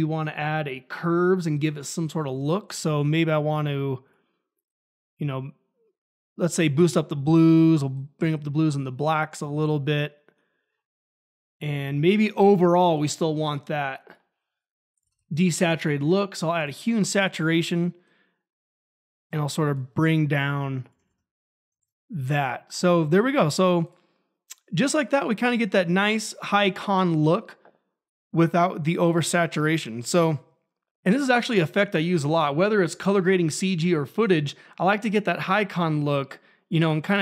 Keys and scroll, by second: 0.0-0.7 typing, 12.5-13.4 typing, 14.7-15.6 typing, 21.0 ctrl+`, 21.7 ctrl+`.